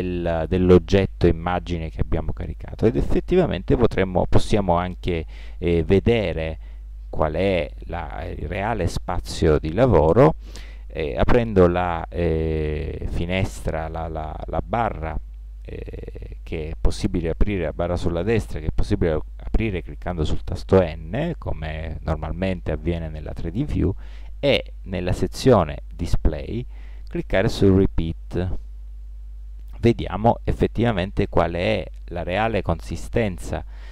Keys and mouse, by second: 6.9 n, 28.7-30.3 drag.